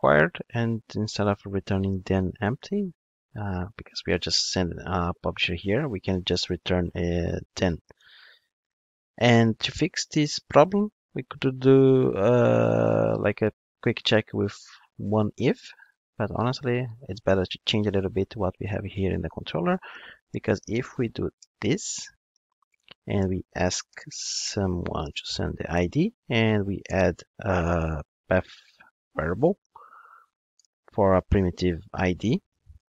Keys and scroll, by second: 7.5 Return, 21.4 Return, 27.6 super+z, 29.5 Return.